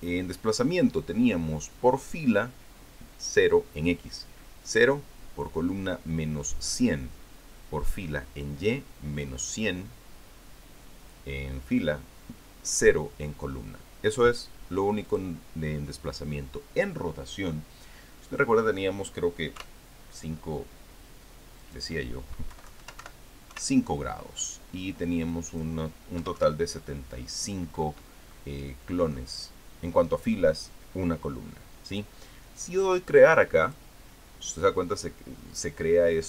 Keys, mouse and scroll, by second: 15.9 click, 20.4 KP_5, 22.4 click, 23.3 Left, 23.8 Delete, 24.3 KP_5, 26.1 click, 27.0 KP_7, 27.2 KP_5, 29.1-30.1 middle drag, 34.5 click.